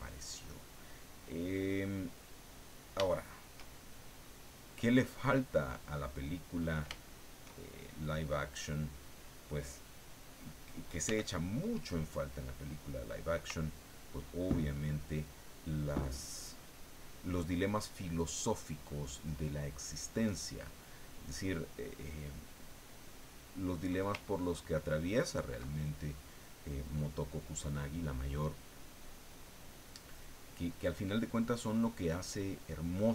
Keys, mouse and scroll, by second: 1.9-2.9 drag, 3.0-4.1 shift+drag, 4.1-5.3 middle drag, 5.5 middle click, 7.0-8.7 shift+middle drag, 11.0 f, 12.5 click, 13.6-24.0 ctrl+drag, 24.2-25.7 ctrl+drag, 26.1-27.2 drag, 27.4 click, 28.3-29.4 drag, 29.6 click, 31.4 click, 32.3 click.